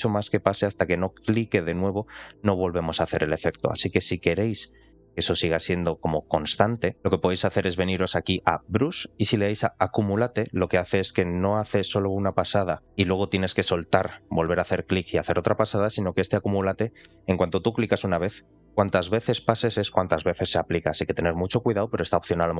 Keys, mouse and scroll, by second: 1.2 click, 6.9 click, 8.5 click.